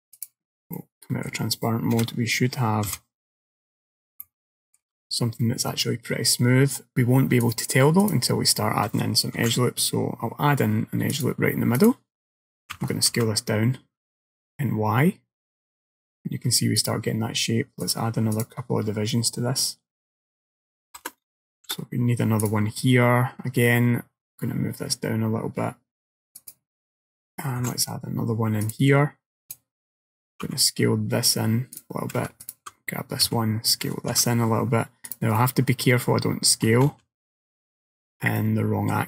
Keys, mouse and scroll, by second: 0.2 click, 0.8 middle click, 2.0 KP_1, 3.0 KP_3, 3.7-4.1 scroll up 3, 4.3 shift+middle click, 5.9 scroll down 1, 7.5 click, 9.4 ctrl+r, 12.8 s, 17.9 click, 18.4 click, 21.6 ctrl+r, 27.7 ctrl+r, 30.5 s, 32.5 alt+click, 33.3 s, 35.4 middle click, 36.9 ctrl+z, 37.3 ctrl+z, 37.8 ctrl+z, 38.4 middle click.